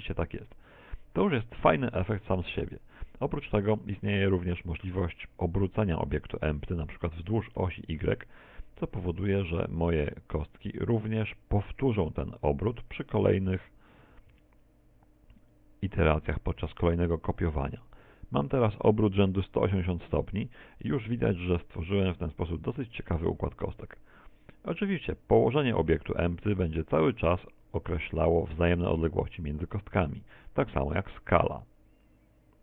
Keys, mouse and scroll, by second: 2.7 click, 7.6 r, 19.8 ctrl+click, 20.6 middle click, 22.1-22.7 scroll up 4, 22.7 shift+middle click, 25.0 click, 30.7 s.